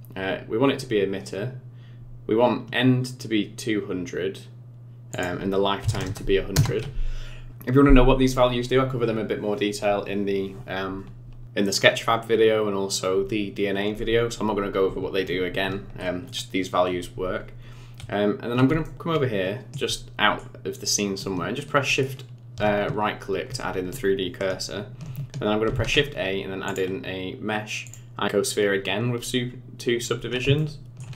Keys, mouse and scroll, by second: 5.1 click, 6.0 KP_0, 18.8 shift+middle click, 19.9 shift+middle click, 21.9 shift+right click, 25.6 shift+a, 30.0-30.4 scroll up 5, 30.6 shift+middle click.